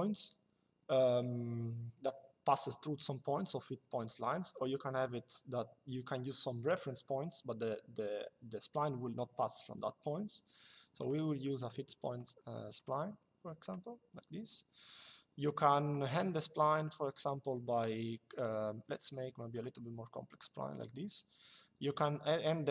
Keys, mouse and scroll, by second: 10.7 click, 19.3 click.